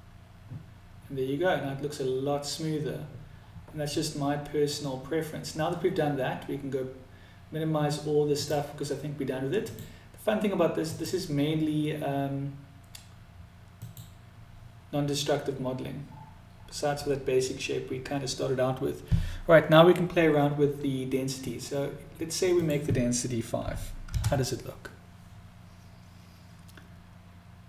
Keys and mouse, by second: 3.3 middle click, 7.6 click, 9.1 click, 10.1 click, 13.2 click, 22.0-27.6 drag.